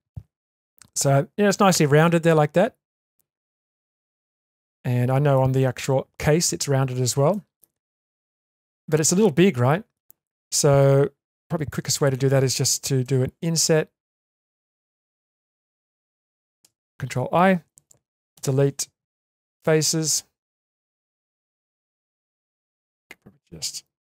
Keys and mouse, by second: 3.8 shift+middle click, 4.4-5.3 middle drag, 7.3 middle click, 7.8 Tab, 8.3-9.9 middle drag, 11.7 a, 13.0 i, 15.3 ctrl+z, 16.6 ctrl+i, 18.3 Delete, 19.7 middle click, 21.5 1.